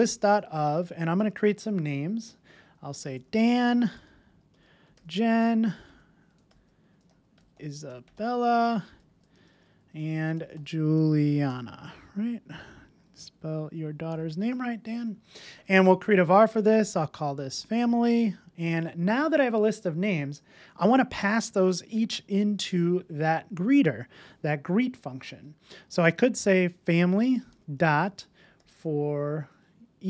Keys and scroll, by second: 0.4 Return, 16.1 Return, 26.8 Return.